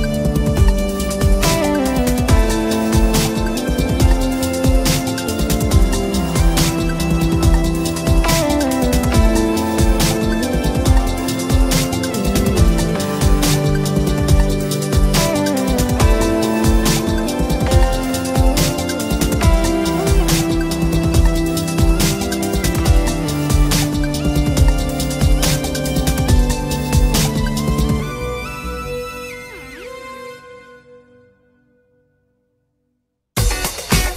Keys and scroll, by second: 1.7 Return, 4.2 Return, 6.9 Return, 11.0 Escape, 19.9 Escape, 24.9 Escape.